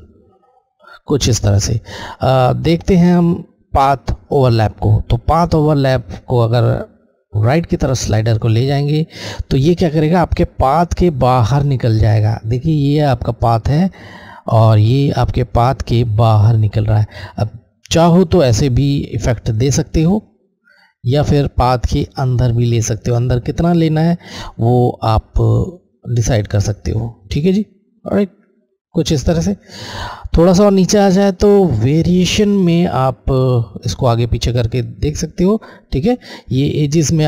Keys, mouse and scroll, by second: 6.3 click, 18.9 click, 33.9 Left, 33.9 click.